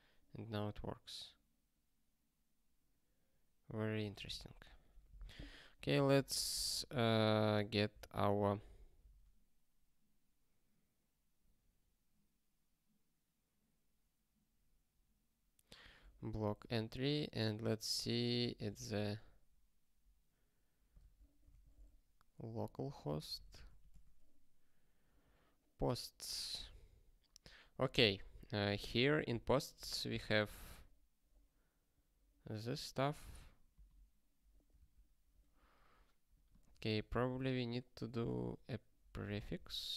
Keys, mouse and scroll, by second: 0.3 scroll up 1, 5.9 click, 6.2 ctrl+space, 6.4 ctrl+a, 6.6 alt+;, 6.9 ctrl+s, 9.3 ctrl+k, 16.5 ctrl+f, 18.5 ctrl+g, 34.7 ctrl+g, 36.4 click, 37.1 Return, 38.0-39.9 typing.